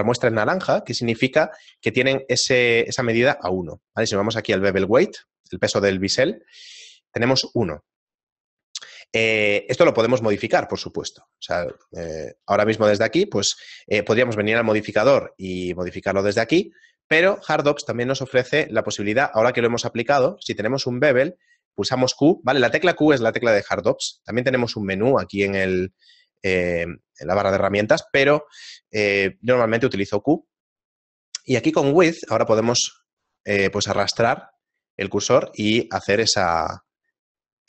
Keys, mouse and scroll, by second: 0.1 right click, 1.7 a, 2.3 right click, 3.7 middle click, 11.7 Tab, 12.1 shift+middle click, 12.5 middle click, 13.2 shift+middle click, 13.8 middle click, 16.9 middle click, 17.3 shift+middle click, 18.3 q, 19.7 right click, 20.4 q, 25.7 click.